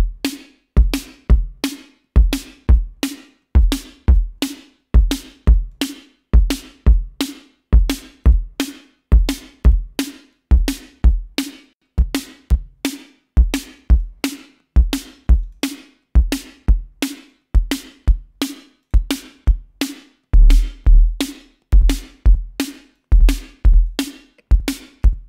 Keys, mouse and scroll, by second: 6.0-8.7 drag, 9.5-10.1 drag, 10.6-14.4 drag, 15.5 click, 16.7-17.2 scroll down 2, 17.2 scroll up 2, 17.5 click, 19.0 click, 20.1-20.4 scroll up 2, 20.8 scroll down 2, 21.2-22.4 drag, 22.5 scroll down 2, 22.8 scroll up 2, 23.1 click, 24.3-24.8 scroll down 4.